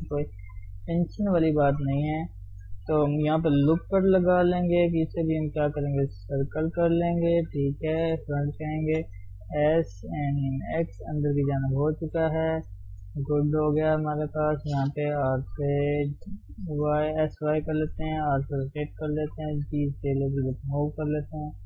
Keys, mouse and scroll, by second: 2.2-3.4 shift+middle drag, 3.4 ctrl+r, 6.4-8.0 right drag, 8.0 KP_1, 8.9 shift+z, 9.3 s, 10.9 shift+z, 11.0-12.7 middle drag, 12.7 scroll down 1, 12.9 KP_3, 13.2-13.9 scroll up 1, 13.9 shift+z, 14.0-15.2 shift+middle drag, 15.2 r, 16.2 s, 17.8 r, 19.2 g, 21.2 shift+middle click.